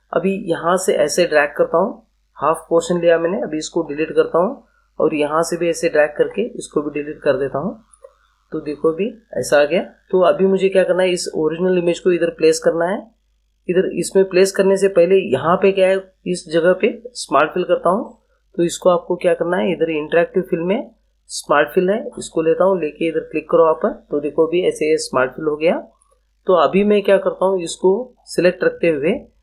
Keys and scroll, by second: 3.8 Delete, 6.2 Delete.